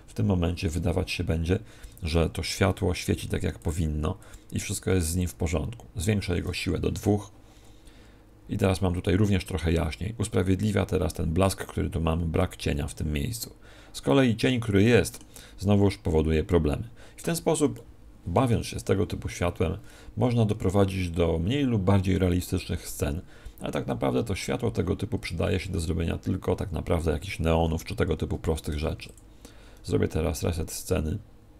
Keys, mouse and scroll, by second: 1.9 Escape, 3.5 click, 25.1 Escape, 28.7 ctrl+n.